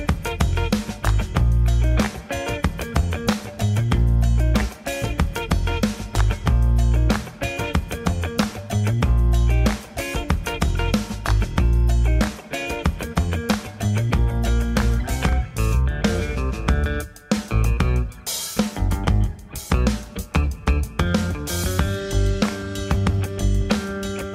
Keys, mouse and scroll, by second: 0.4 s, 1.9 g, 2.2 s, 2.5 click, 3.3 g, 3.9 s, 4.5 g, 5.7 s, 6.1 click, 7.0 shift+click, 7.2-10.3 typing, 8.6 click, 9.6 click, 11.2 shift+click, 11.5 shift+click, 12.0-14.0 typing, 14.9 click, 15.3-17.8 typing, 19.6 click, 19.9-24.3 typing, 23.2 click.